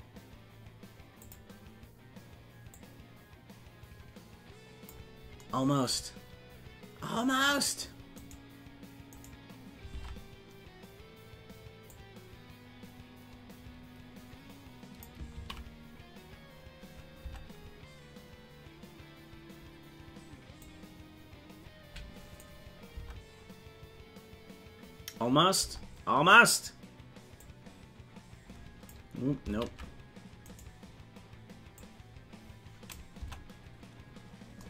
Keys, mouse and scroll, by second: 1.8 click, 2.7-4.9 drag, 6.1 scroll up 1, 7.5 right click, 7.5 scroll up 3, 9.9 ctrl+Tab, 11.9-15.1 drag, 16.3 ctrl+z, 20.6-22.4 drag, 23.5 Tab, 27.4-28.9 drag, 29.4 ctrl+z, 30.5-31.7 right drag, 31.7-32.9 drag, 33.8 Tab.